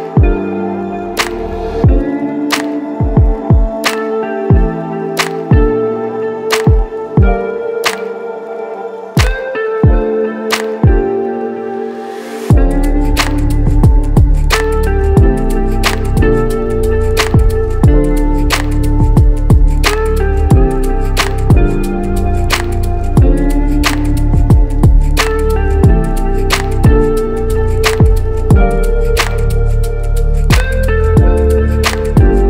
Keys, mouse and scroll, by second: 0.3 click, 3.0 shift+click, 3.6 shift+click, 4.2 shift+click, 4.7 shift+click, 5.3 shift+click, 6.2 shift+click, 7.1 shift+click, 7.5 shift+click, 8.0 shift+click, 8.5 shift+click, 9.1 shift+click, 9.8 shift+click, 10.6 shift+click, 11.1 shift+click, 11.9 shift+click, 13.5 shift+click, 13.9 shift+click, 14.6 shift+click, 15.1 shift+click, 15.7 shift+click, 17.1 shift+click, 18.2 shift+click, 19.2 shift+click, 19.9 shift+click, 22.2 shift+click, 22.9 shift+click, 23.8 shift+click, 24.7 shift+click, 25.6 shift+click, 26.5 shift+click, 27.5 shift+click, 28.2 shift+click, 29.2 shift+click, 30.3 x, 30.4 x.